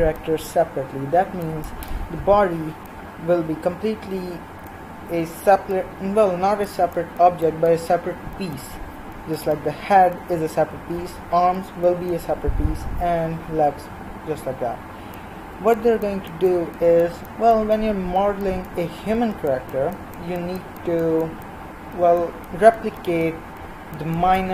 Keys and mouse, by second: 14.6-19.6 middle drag.